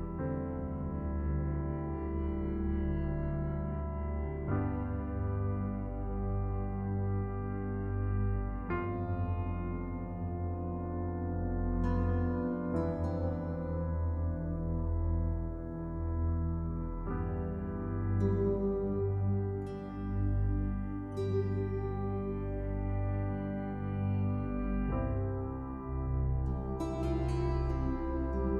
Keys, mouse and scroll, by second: 0.2 Num_Lock, 2.0 KP_1, 2.3 KP_0, 4.7 click, 5.5-5.9 scroll up 1, 7.0 Delete, 7.6-8.5 scroll down 1, 9.5 d, 10.0-11.1 scroll down 1, 11.1 scroll up 1, 12.0-12.3 scroll down 1, 14.5 scroll down 1, 14.8 scroll up 1, 15.3 space, 15.5 click, 15.8 space, 17.0 ctrl+j, 17.7 click, 21.9 scroll down 1, 22.5 click, 25.6-25.9 scroll down 1, 25.9-26.6 scroll up 1, 26.6 space, 27.1 ctrl+alt+click, 27.5 ctrl+alt+click, 28.2 click.